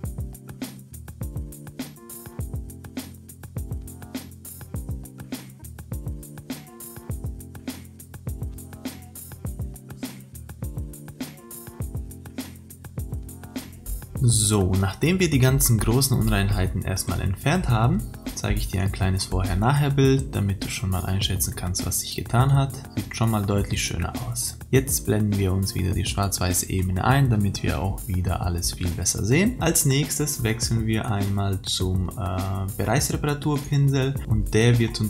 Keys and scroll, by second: 10.6 ctrl+=.